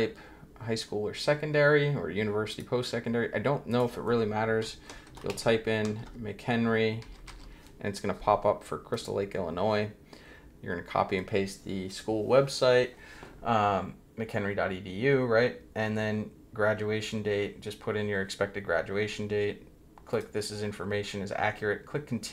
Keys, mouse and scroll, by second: 2.5 click, 3.7 click, 5.3 c, 6.0 shift+h, 7.0 e, 8.9 click, 19.2 scroll down 2, 20.1 click, 20.8 click, 20.9-21.2 scroll down 1.